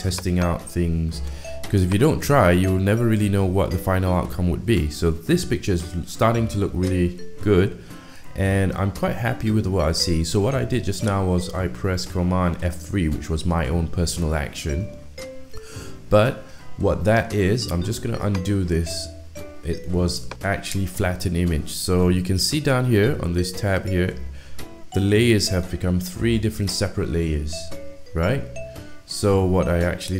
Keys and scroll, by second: 8.5 F3.